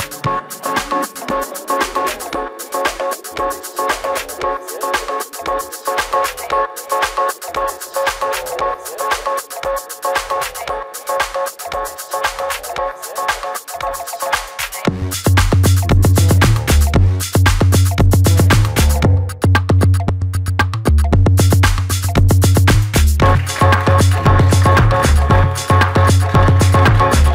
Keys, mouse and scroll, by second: 1.2-2.0 typing, 6.3 Escape, 6.3 space, 6.6 Escape, 7.5 shift+middle click, 11.1 shift+middle click, 14.6 shift+middle click, 14.7 shift+double middle click, 20.4 Delete, 21.4 shift+middle click, 22.2 shift+middle click.